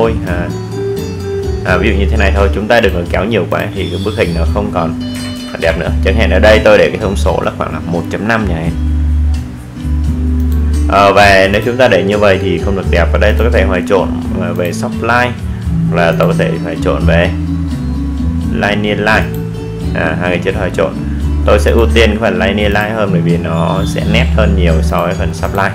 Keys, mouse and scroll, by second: 3.6 click, 12.5 click, 14.9 click.